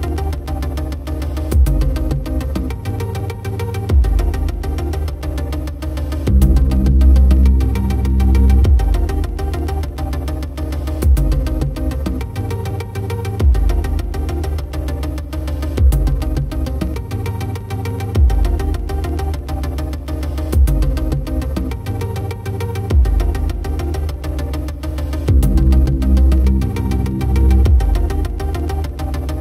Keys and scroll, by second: 12.8 typing, 26.3 ctrl+=, 28.3 alt+space.